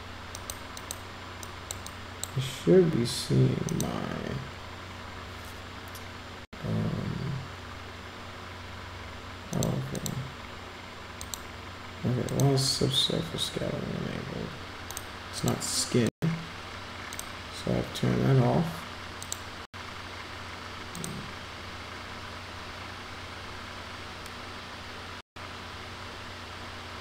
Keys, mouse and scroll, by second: 0.4 click, 0.7 click, 1.5 click, 2.0 drag, 3.8 click, 9.5 click, 9.9 click, 11.2 click, 12.3 click, 15.4 click, 16.1 click, 17.0 click, 19.2 click, 20.9 click.